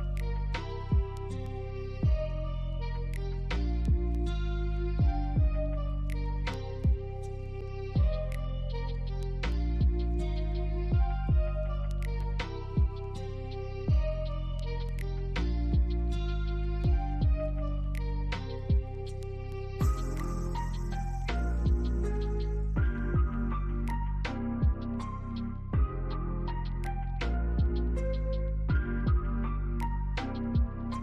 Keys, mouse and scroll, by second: 0.1 ctrl+z, 1.1 alt+click, 3.1 alt+click, 3.6 alt+middle click, 6.4 middle click, 7.3 scroll up 1, 8.0 alt+middle click, 8.3 alt+click, 9.2 BackSpace, 10.6 scroll up 1, 11.6 alt+click, 12.7 scroll down 1, 13.0 middle click, 16.5 scroll up 1, 16.8 middle click, 17.6 scroll up 1, 19.9 scroll down 1, 20.2 alt+middle click, 21.4 right click, 28.8 double click, 29.2 scroll up 1, 29.5 alt+middle click, 29.9 scroll down 1, 30.5 alt+right click.